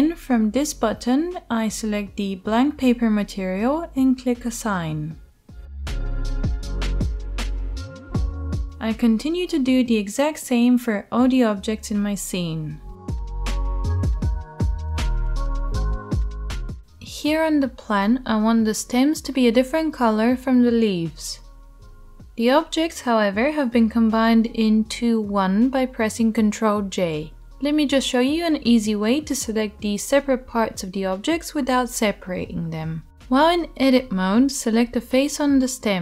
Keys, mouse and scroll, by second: 2.1 shift+click, 2.1 shift+middle click, 2.5 shift+click, 2.5 shift+middle click, 7.1 click, 7.1 middle click, 8.8 click, 8.8 middle click, 9.3 Tab, 11.1 Tab, 11.2-13.3 shift+middle drag, 11.4 click, 13.3 right click, 13.6 middle click, 13.8 Tab, 14.0-15.2 right drag, 14.1 Tab, 14.8 shift+middle click, 15.2-17.1 middle drag, 17.1 right click, 17.2 middle click, 17.3 right click, 17.4 right click, 17.6-20.1 middle drag, 20.1 Tab, 20.1-22.5 drag, 20.1-36.0 right drag, 21.9 Tab, 25.2 shift+click, 26.5 ctrl+j, 34.1 Tab.